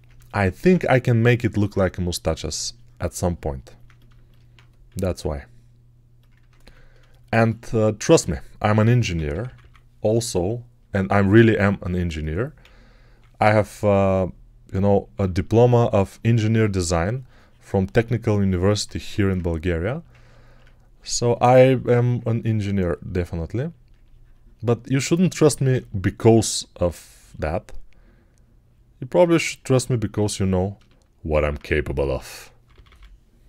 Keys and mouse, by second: 4.7 r, 6.5 ctrl+r, 6.5-18.0 ctrl+drag, 8.6-9.4 typing, 12.5 [, 13.0 [, 13.0 [, 15.0 3, 18.8 1, 30.0 alt+right click, 30.6 alt+shift+right click, 32.5 [, 32.6 [, 32.7 [.